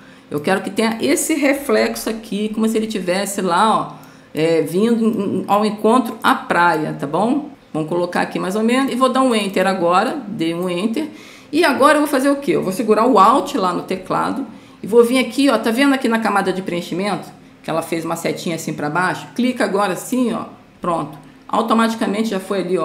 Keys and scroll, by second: 2.1 ctrl+0.